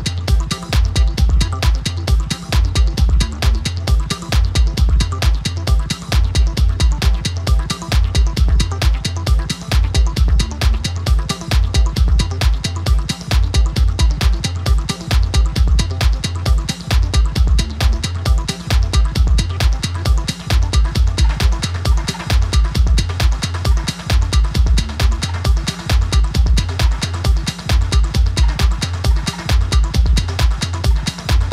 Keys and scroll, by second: 3.0 typing, 8.2-9.1 typing, 10.6-11.8 typing.